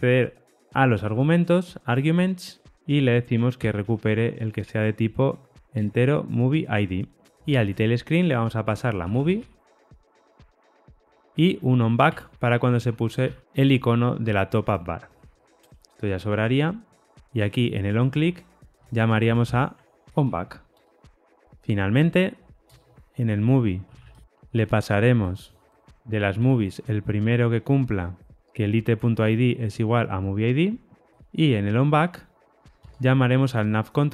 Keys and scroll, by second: 0.5 Return, 5.1 Return, 5.6 Tab, 7.3 super+z, 12.0 Tab, 13.2 alt+super+l, 15.5 super+BackSpace, 15.5 ctrl+y, 18.7 ctrl+shift+Right, 28.3 Tab, 32.7 Tab.